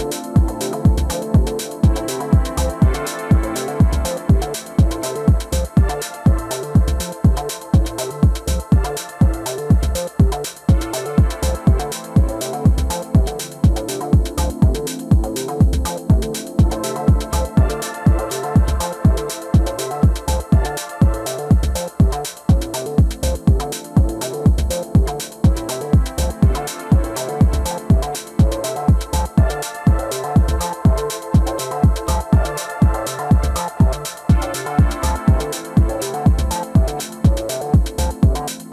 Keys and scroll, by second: 10.4 ctrl+j, 11.9 ctrl+t, 17.9 ctrl+j, 19.2 ctrl+t, 25.9 ctrl+t, 37.0 ctrl+t.